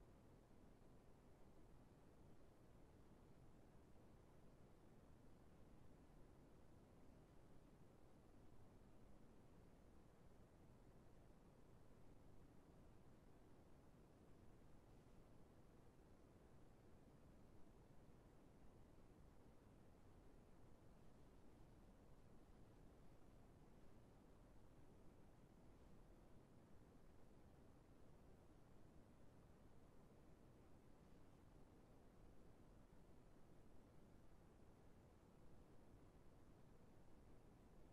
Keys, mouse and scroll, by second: 14.2 scroll down 1, 15.0 right click, 18.1-20.4 scroll down 1.